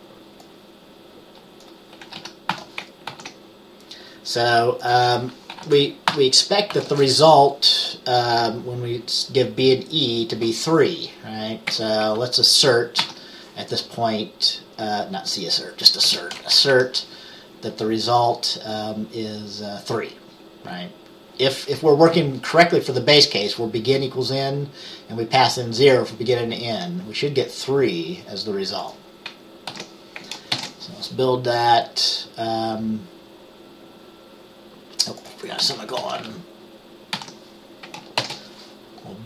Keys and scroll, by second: 2.0-2.7 typing, 3.2 ctrl+s, 5.6-7.0 typing, 11.8 ctrl+s, 11.8 typing, 13.1 ctrl+s, 16.2 BackSpace, 16.7 Up, 16.9 Up, 29.8 ctrl+s, 30.6 ctrl+b, 37.3 ctrl+s, 37.3 ;, 38.3 ctrl+b.